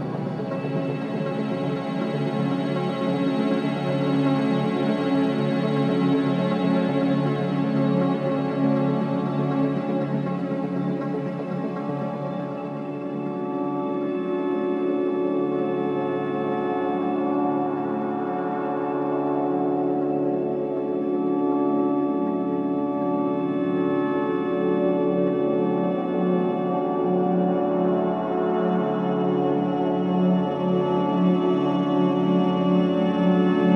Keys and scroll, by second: 2.1 space.